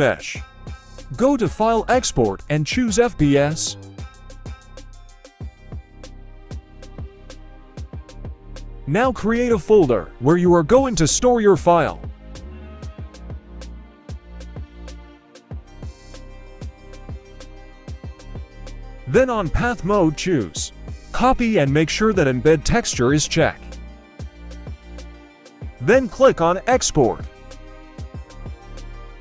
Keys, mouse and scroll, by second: 0.6-8.3 drag, 27.0 middle click.